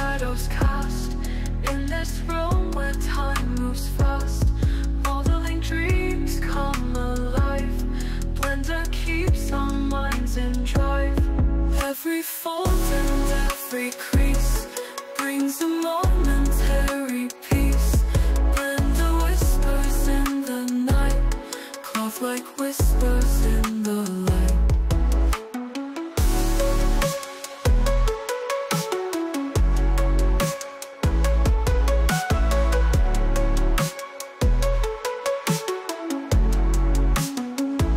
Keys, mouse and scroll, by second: 3.5 click, 6.7 click, 7.9 click, 9.1 click, 11.5-12.7 drag, 16.9 click, 19.4-22.6 drag, 23.2 alt+click, 24.1 alt+middle click, 30.2 click, 33.5 click.